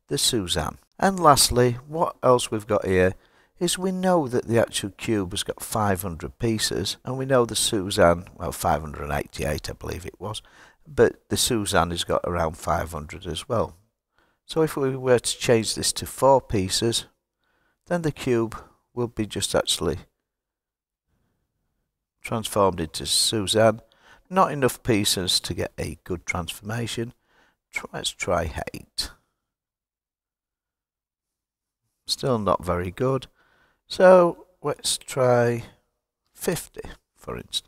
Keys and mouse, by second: 14.1-17.3 drag, 24.1-26.7 drag, 30.4 click, 32.2-37.6 drag.